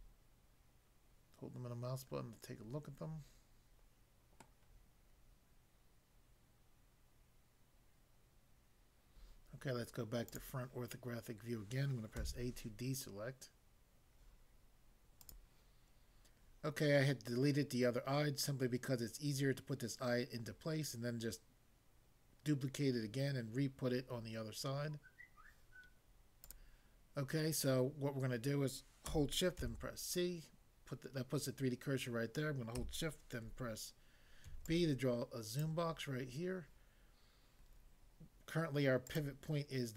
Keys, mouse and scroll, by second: 4.4 middle click, 10.3 click, 12.2 a, 15.2 click, 15.4 click, 26.4 click, 26.7 click, 29.6 c, 34.5 b, 34.6 click, 35.6 click, 39.1 click.